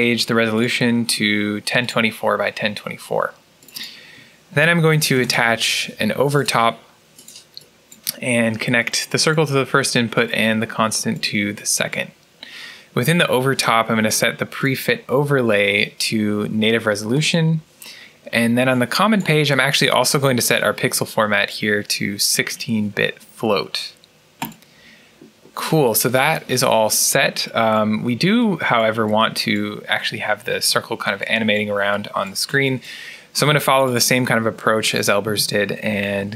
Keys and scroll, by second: 4.5-5.7 typing, 35.1 Tab, 35.5-36.3 typing.